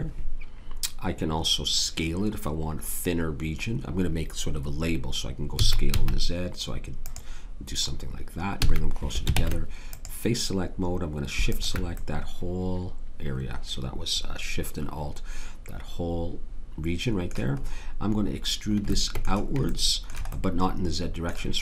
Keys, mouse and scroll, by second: 5.6 s, 8.5 a, 9.3 ctrl+Tab, 12.0-14.4 drag.